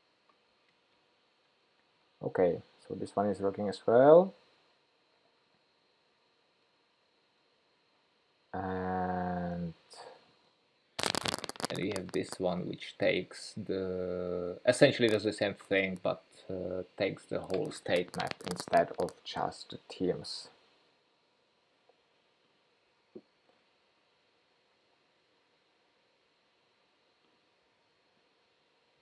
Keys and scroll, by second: 0.8 super+BackSpace, 23.3 shift+super+p, 27.9 shift+super+p.